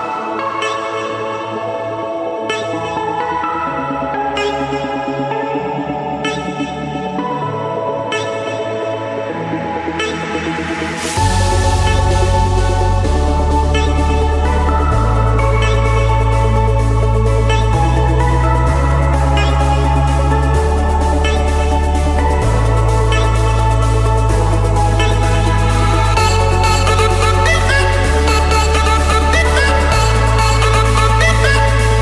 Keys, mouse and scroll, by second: 1.1 click, 1.4 Return, 1.8 Return, 3.6 Escape, 4.7 click, 5.6 click, 6.6 click, 6.9 scroll, 7.7 click, 8.3 click, 8.7 scroll, 9.5 click, 10.1 click, 10.4 scroll, 11.1 click, 11.3 Escape, 13.2-14.7 typing, 14.9 Return, 16.0-17.0 drag, 18.5-19.6 drag, 20.9 click, 21.8-23.4 scroll down 3, 23.4 scroll down 1, 24.5-25.5 drag, 26.5-27.5 drag, 30.6 click.